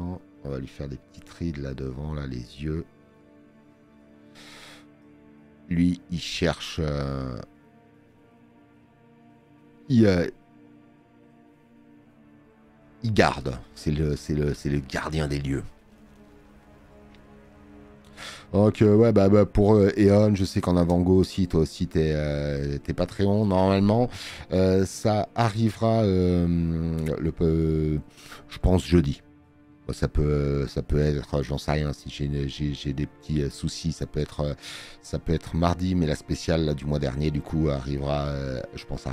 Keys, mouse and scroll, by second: 8.5 space, 8.9 click, 14.4 space, 14.6 click, 34.0 space, 34.3 click.